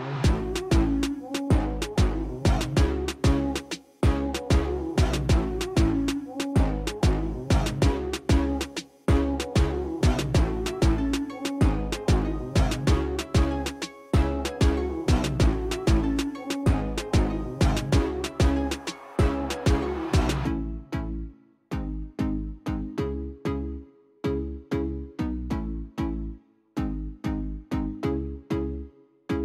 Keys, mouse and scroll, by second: 0.1 click, 0.4 click, 0.7 drag, 3.3 click, 3.6 click, 4.1 click, 4.5 click, 4.8 click, 5.5 click, 7.1 click, 8.2 click, 11.0 click, 11.7 KP_0, 12.0 KP_5, 12.2 Return, 12.9 click, 13.5 KP_5, 13.7 Return, 14.9 click, 15.6 KP_2, 15.8 Return, 16.6 click, 17.2 KP_3, 17.3 KP_0, 17.7 Return, 24.3 click, 24.9 KP_2, 25.0 KP_5, 25.2 KP_0, 25.4 Return, 26.6 click, 27.2 KP_0, 27.4 KP_5, 27.6 Return, 28.7 click.